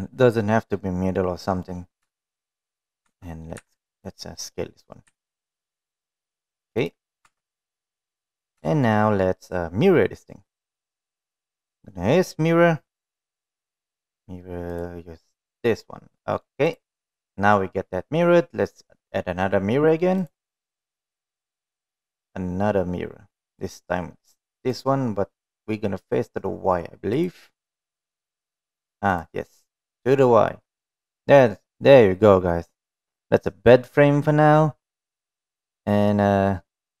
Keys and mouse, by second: 1.2-2.1 middle drag, 2.6 shift+middle click, 3.0 middle drag, 3.6 Tab, 4.1 3, 4.4 click, 4.9 middle click, 5.6 s, 7.6 click, 7.8 Tab, 8.1 middle drag, 9.2 shift+middle click, 11.5 click, 12.2-14.0 drag, 16.7-17.0 middle drag, 17.2 click, 20.8-22.6 drag, 27.8 click, 29.1 click, 29.8 drag, 30.1-30.9 middle drag, 31.3-33.4 middle drag, 34.0-36.7 middle drag.